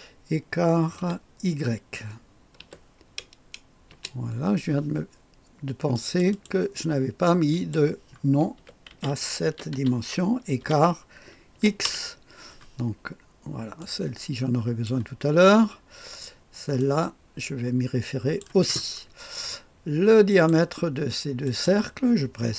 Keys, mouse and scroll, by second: 1.0 typing, 2.6 typing, 3.9 Return, 5.9-7.1 drag, 5.9 typing, 7.5 click, 8.3-12.1 typing, 13.8-15.3 drag, 14.9 typing, 18.4 click, 20.5 click, 21.4 click.